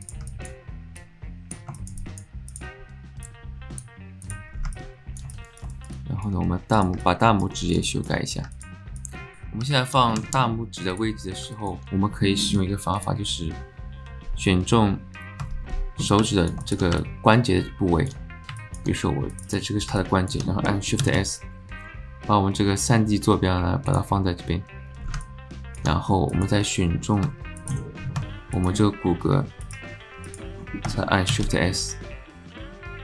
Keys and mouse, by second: 0.3 alt+click, 1.0 click, 1.8 alt+shift+click, 2.0 click, 2.5 click, 3.3 click, 4.8 alt+click, 5.3 alt+shift+click, 5.7 shift+click, 6.0 alt+click, 7.2 alt+middle click, 7.6 alt+shift+middle click, 7.9 alt+middle click, 8.6 alt+middle click, 9.0 click, 9.3 Tab, 9.7 alt+click, 10.9 click, 11.6 alt+click, 13.0 click, 16.2 alt+click, 16.6 alt+shift+click, 17.0-18.0 alt+drag, 18.5 alt+click, 19.4 click, 20.0 click, 21.0 shift+s, 24.0 s, 25.2 alt+click, 26.4 click, 27.3 Tab, 27.6 click, 28.5 click, 29.6 click, 31.3 shift+s.